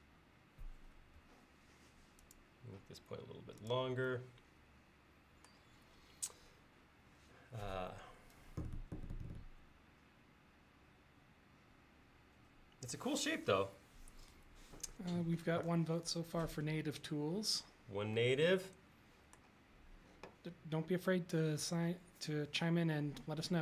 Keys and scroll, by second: 1.2 Home.